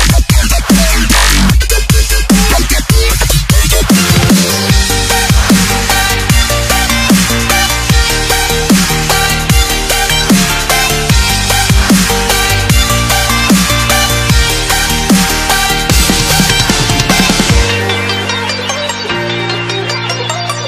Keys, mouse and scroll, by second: 0.5 click, 5.6 click, 8.6 ctrl+shift+s, 10.0 click, 15.2 ctrl+z, 16.1 ctrl+s, 18.5 ctrl+s, 19.3 click.